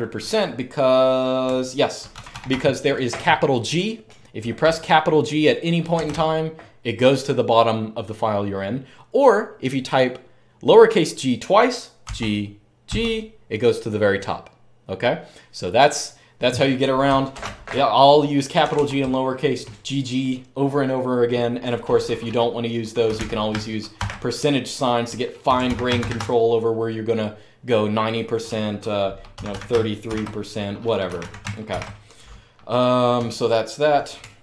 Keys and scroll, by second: 1.3-2.2 typing, 5.7 typing, 11.8-12.6 typing, 17.1 typing, 18.4 typing, 22.6-23.7 typing, 25.0-26.2 typing, 29.1-34.4 typing.